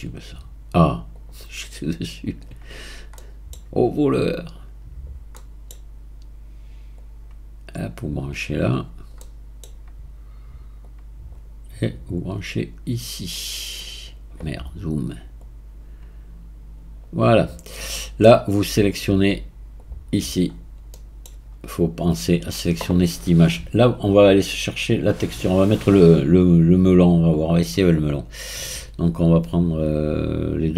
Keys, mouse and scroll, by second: 2.8-3.2 scroll up 2, 3.2-4.1 middle drag, 4.1 click, 5.1 scroll up 2, 5.4-7.0 middle drag, 7.0 click, 8.8-9.2 scroll down 2, 9.2-10.8 middle drag, 10.8 click, 12.2 drag, 15.4 drag, 17.4-17.9 scroll down 1, 17.9-19.8 middle drag, 19.8 click, 20.4-20.9 scroll down 4, 20.9-23.9 middle drag, 24.6 click, 25.7-30.1 drag.